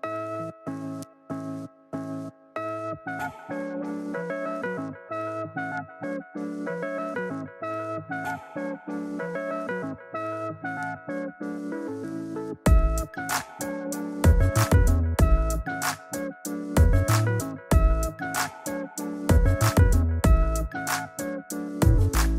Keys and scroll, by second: 8.1 Return, 22.2 super+-.